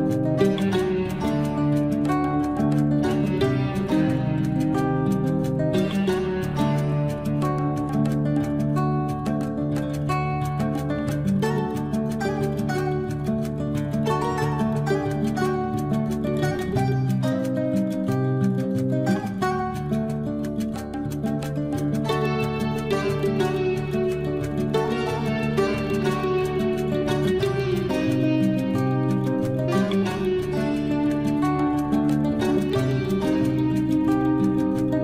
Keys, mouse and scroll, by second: 0.8 click, 1.3-2.2 scroll up 1, 2.2 click, 7.8 Escape, 12.6 t, 13.0-14.0 scroll up 1, 14.9 click, 19.7 Escape, 23.0 click, 23.5 scroll up 1, 24.4 click, 26.9-27.3 scroll up 1, 27.3 click, 28.8 scroll up 1, 29.7 click, 30.0-31.3 scroll down 1, 33.7 scroll up 1, 34.7 click.